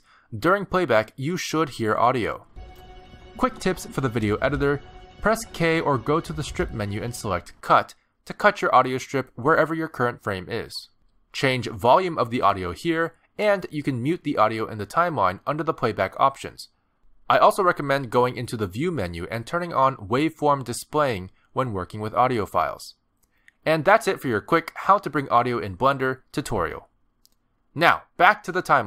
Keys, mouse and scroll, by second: 2.5 space, 7.5 space, 13.9 click, 14.7 click, 26.2 click, 27.1 space, 28.0 click.